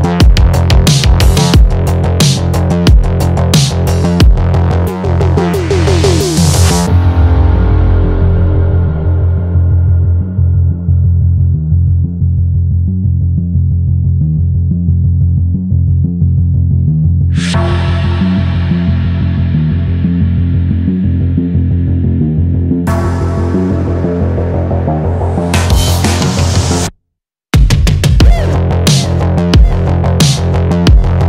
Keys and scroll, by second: 6.9 Return, 27.8 Return.